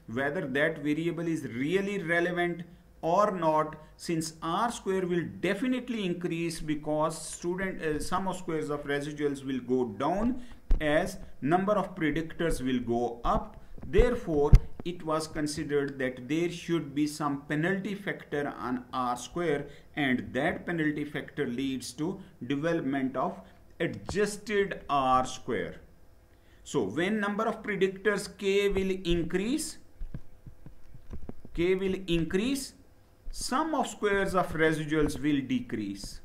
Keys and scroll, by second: 20.1 Down.